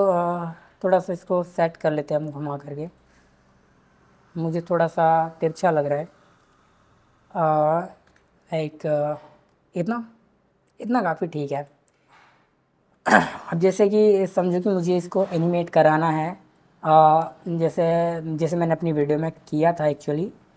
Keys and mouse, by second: 2.9 click, 5.8 click, 8.1 r, 10.8 click, 11.5 click.